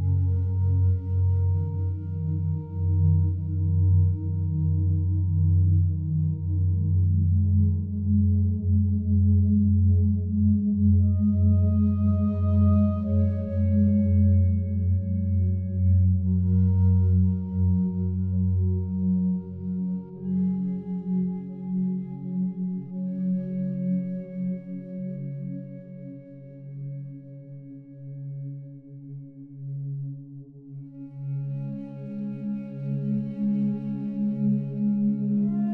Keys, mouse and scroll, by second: 1.7 Tab, 2.8 l, 3.9 p, 4.8 click, 5.9 Tab, 6.3 right click, 8.3 click, 10.0-11.1 typing, 12.7 Return, 14.3 right click, 17.1 right click, 20.1 click.